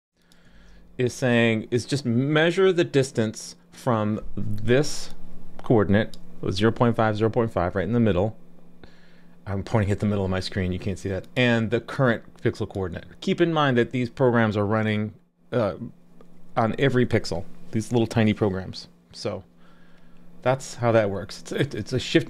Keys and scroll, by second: 0.5 super+s.